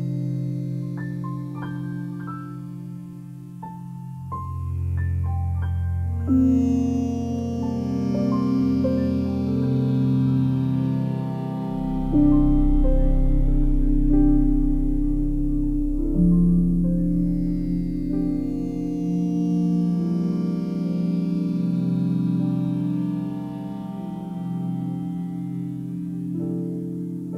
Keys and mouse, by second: 1.1 j, 1.9 click, 3.6 ctrl+z, 3.8 ctrl+z, 4.1 ctrl+z, 4.6 ctrl+z, 9.2 click, 10.2 click, 10.7-12.2 drag, 13.5 shift+click, 15.4 j, 16.9-18.8 drag, 18.8 j, 19.5 click, 20.5 shift+click, 21.4 j, 22.8 click, 23.6 ctrl+alt+click, 24.1-25.5 alt+drag, 25.8 ctrl+alt+click, 26.3 ctrl+alt+click.